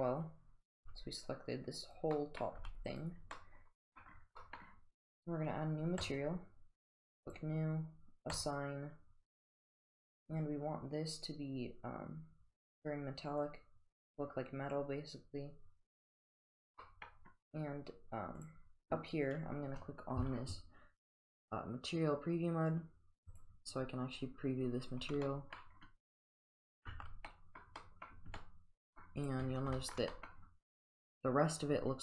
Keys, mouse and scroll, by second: 0.8 g, 2.2 middle click, 2.6 g, 3.4 middle drag, 3.7 middle drag, 4.4 middle click, 6.1 click, 7.4 click, 8.4 click, 10.3 click, 13.4-14.1 drag, 15.9 click, 16.8 middle click, 18.4 click, 23.4 click, 25.3 middle click, 26.6 click, 26.9 Tab, 27.3-27.6 middle drag, 27.8 middle drag, 28.4-29.0 middle drag, 29.2 click, 29.8 shift+middle drag, 30.1 middle click.